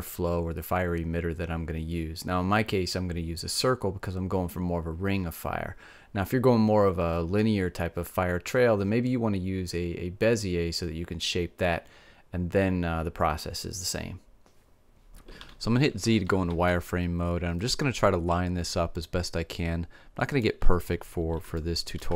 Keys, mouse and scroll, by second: 15.4 z, 16.5 s, 20.4-22.1 drag.